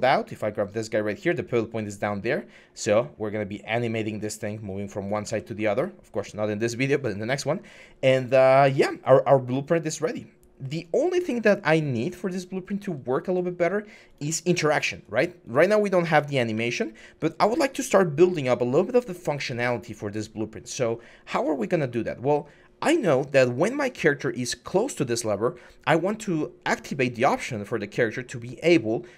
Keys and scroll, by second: 0.9 e, 5.0 ctrl+z, 11.9-12.6 typing, 15.8-16.3 typing.